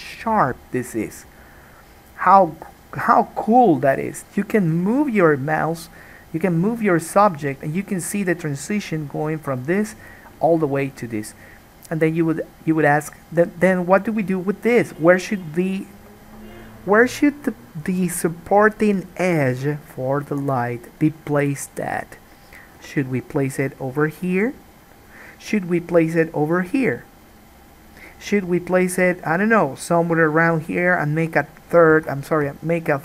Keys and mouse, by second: 22.9 k.